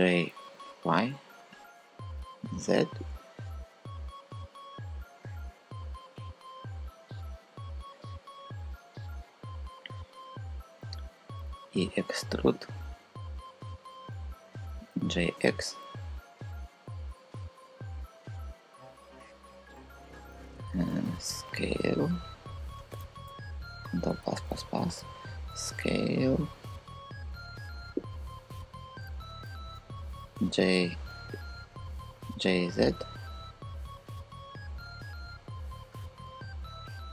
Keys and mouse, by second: 0.1 y, 1.1 z, 11.2 e, 14.6 g, 15.1 x, 19.5-20.9 typing, 20.3 Escape, 22.5 Escape, 23.7 ctrl+KP_Add, 23.9 ctrl+KP_Add, 24.5 ctrl+KP_Add, 24.9 s, 27.6 click, 28.0 click, 29.0 super+z, 30.0 f, 31.8 g, 32.2 z.